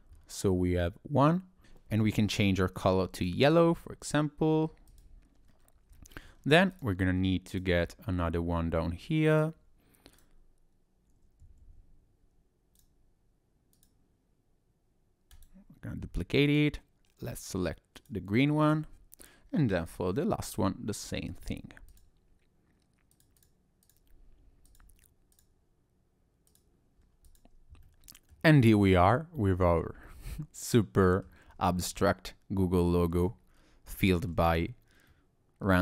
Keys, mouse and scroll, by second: 27.9 middle click, 27.9-28.7 scroll down 3, 28.8-29.1 scroll up 1, 29.4-29.7 scroll up 2, 29.7-30.1 scroll down 2, 30.1 middle click, 31.5 scroll down 1, 31.9 middle click, 33.6 scroll up 2, 34.0 shift+middle click, 34.6-35.1 scroll down 2, 35.1 middle click.